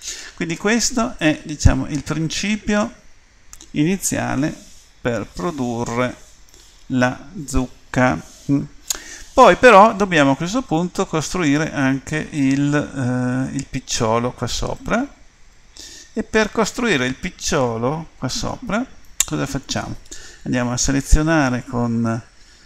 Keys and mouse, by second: 0.0 Escape, 1.2 click, 2.1 click, 14.9-16.0 middle drag.